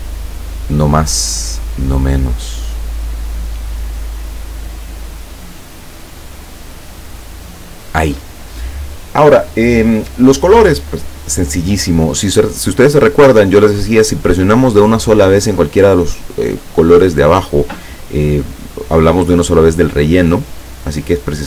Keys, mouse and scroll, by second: 0.2 click, 1.1-3.9 drag, 4.6-6.0 drag, 6.5-8.1 drag.